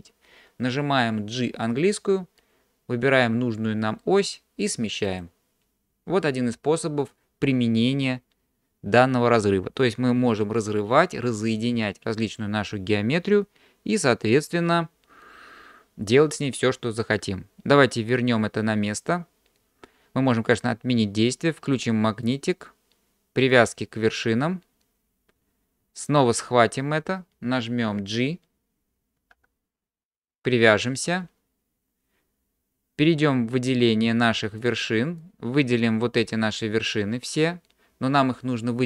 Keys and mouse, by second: 1.9 g, 21.7 click, 22.3-24.9 drag, 29.3 g, 33.9 middle click, 35.3 click.